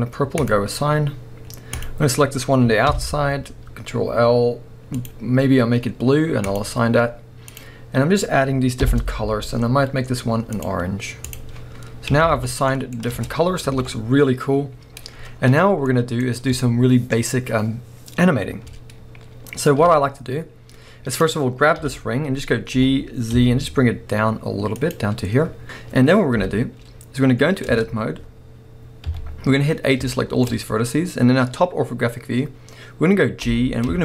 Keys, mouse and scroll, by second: 0.4-1.8 drag, 2.9 ctrl+l, 5.0 click, 6.5-7.6 drag, 8.8 ctrl+l, 10.5 click, 11.2-12.7 drag, 11.8-12.3 scroll down 1, 12.3 alt+a, 12.7-21.1 middle drag, 13.2 Tab, 13.7 alt+a, 15.3-15.8 scroll down 2, 19.8 KP_7, 20.4-21.1 scroll up 2, 21.1 click, 21.8 KP_1, 22.7 g, 24.9 click, 26.4 KP_7, 27.3-27.8 scroll down 1, 27.8 Tab, 28.0-29.0 scroll up 1, 29.0 a, 30.1 shift+middle click, 30.5 scroll up 1, 33.4 g.